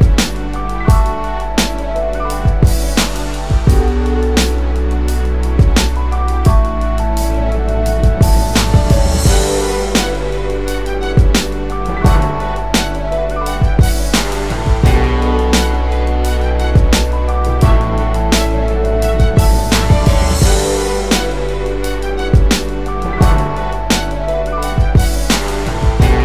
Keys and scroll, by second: 17.5 space, 24.5 space.